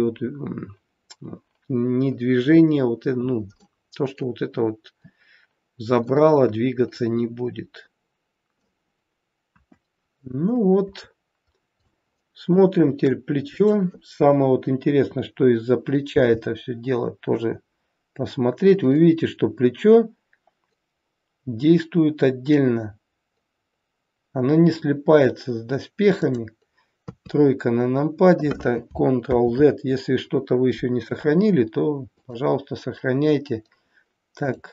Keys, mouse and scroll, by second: 3.5 middle click, 6.0 middle click, 9.4 KP_1, 10.0-10.4 scroll down 1, 10.8 scroll down 1, 11.4 scroll down 1, 11.9 shift+middle click, 13.5 click, 16.0 g, 29.3 ctrl+z, 32.0 click, 34.3 click.